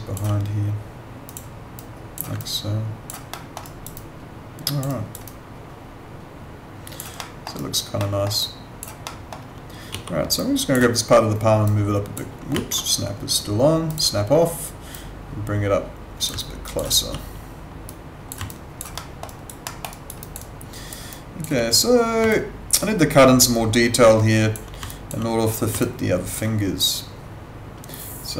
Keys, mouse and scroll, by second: 1.3 click, 2.4 alt+click, 3.3 alt+middle click, 3.7 alt+right click, 4.0 alt+click, 4.9 alt+right click, 5.2 alt+click, 7.2 alt+middle click, 7.6 alt+right click, 7.9 alt+middle click, 8.4 alt+click, 9.1 alt+middle click, 9.9 w, 10.4 click, 13.9 click, 16.4 alt+click, 16.9 r, 17.9 click, 18.5 alt+click, 19.0 alt+middle click, 19.3 alt+right click, 19.7 alt+middle click, 19.9 alt+right click, 20.2 alt+click, 20.4 alt+right click, 21.1 alt+click, 22.3 alt+click, 24.9 alt+click, 25.8 alt+click.